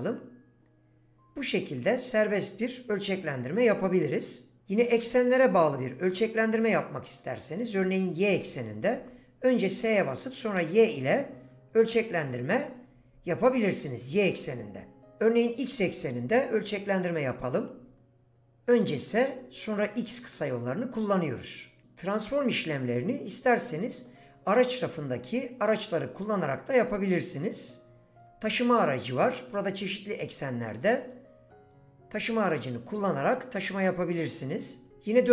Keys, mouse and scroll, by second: 8.9 s, 10.1 y, 15.7 s, 16.2 x, 29.5 click, 34.9 ctrl+z.